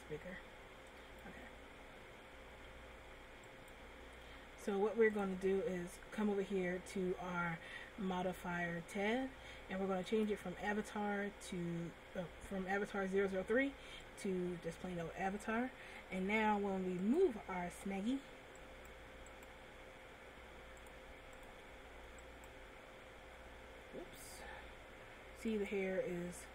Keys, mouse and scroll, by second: 3.6 click, 10.3 click, 17.5 shift+click, 19.0 right click, 19.9 right click, 20.9 click, 22.8 right click.